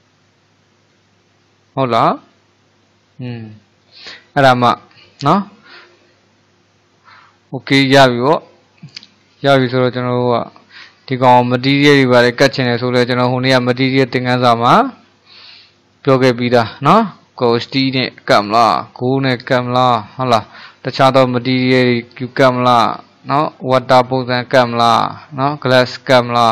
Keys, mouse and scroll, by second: 2.2-3.9 middle drag, 3.9 click, 4.3-8.0 middle drag, 8.0-8.5 scroll up 1, 8.5-9.8 middle drag, 9.8-10.5 scroll down 3, 10.5-11.9 shift+middle drag, 11.9-12.5 scroll up 3, 12.5-16.2 shift+middle drag, 16.2-16.6 scroll up 1, 16.6-17.6 shift+middle drag, 17.6-18.5 scroll down 1, 18.5-26.5 shift+middle drag.